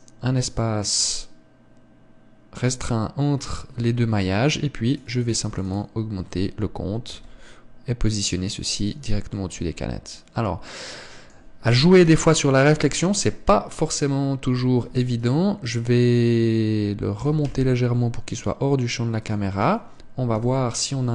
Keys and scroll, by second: 8.0 g, 12.9 KP_0, 15.7 ctrl+s, 18.1 g.